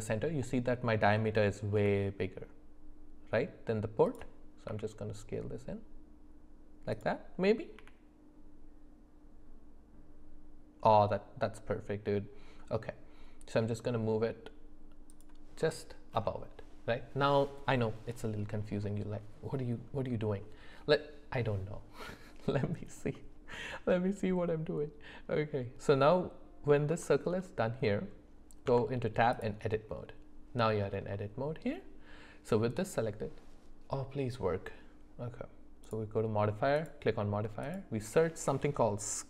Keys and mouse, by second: 1.7 g, 4.7 s, 7.8 g, 23.1-26.8 middle drag, 27.0 shift+middle click, 27.9 middle click, 28.7 Tab, 31.2 middle click, 36.8-39.2 drag.